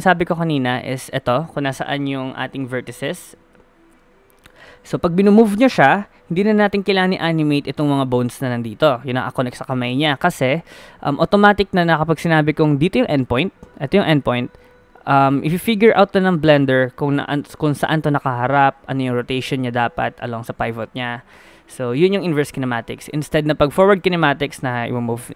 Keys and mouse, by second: 2.5 middle click, 5.0 g, 7.0 click, 10.8 g, 23.6 g.